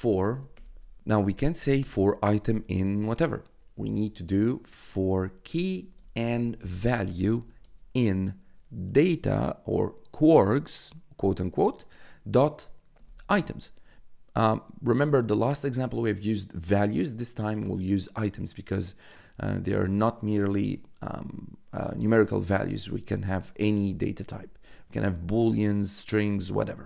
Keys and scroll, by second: 0.0-3.3 typing, 4.5-9.1 typing, 12.7-13.9 typing, 22.6 shift+9.